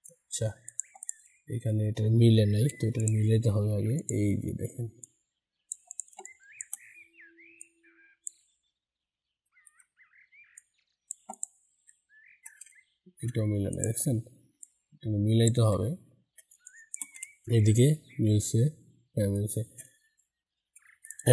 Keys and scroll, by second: 2.7 ctrl+y, 9.4 ctrl+z, 20.5 ctrl+y.